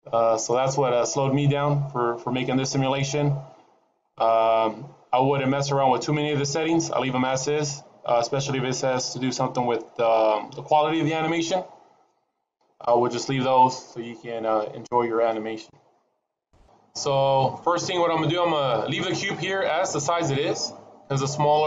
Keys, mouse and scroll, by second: 0.6 click, 0.6 scroll up 4, 3.8 click, 3.8-5.8 scroll up 12, 5.8-6.6 scroll up 6, 6.6-8.4 scroll up 3, 8.4 scroll up 7, 16.6-18.6 scroll down 3, 19.6-21.2 scroll up 1.